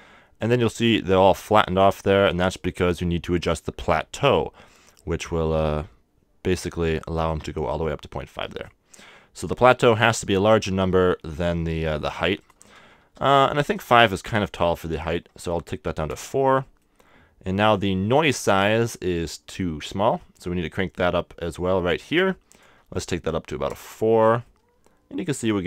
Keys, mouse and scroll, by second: 0.4-3.2 middle drag, 6.0 click, 12.4-14.2 drag, 13.8-16.5 middle drag, 15.0-16.8 drag, 16.8-18.5 middle drag, 19.1-20.8 middle drag, 22.5-24.4 drag, 24.4-25.6 middle drag.